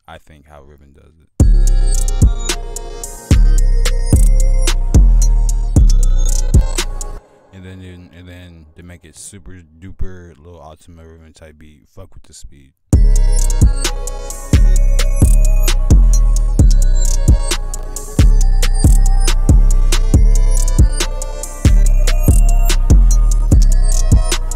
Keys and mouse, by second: 1.3 F1.